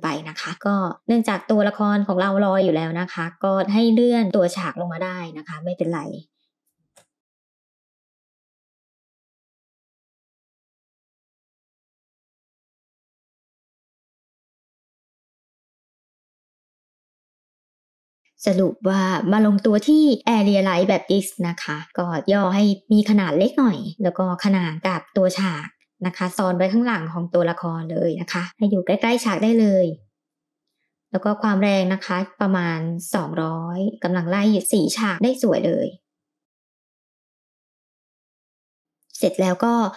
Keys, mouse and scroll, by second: 0.5 g, 6.6 click, 7.4 shift+middle click, 7.9-9.7 typing, 8.0 scroll up 2, 8.1 shift+middle click, 10.6 middle click, 10.7 scroll down 2, 10.8 middle drag, 11.1 KP_3, 11.2 scroll up 3, 11.3 shift+middle click, 11.5 r, 11.9 g, 12.3 click, 12.5 KP_0, 13.0 middle click, 13.1 scroll down 5, 13.4 middle click, 13.5 click, 15.6 g, 16.9 middle drag, 17.2 click, 17.4 middle click, 17.9 g, 20.2 s, 24.6 g, 32.9-34.6 drag, 33.9 KP_0, 37.1 g, 38.8 click.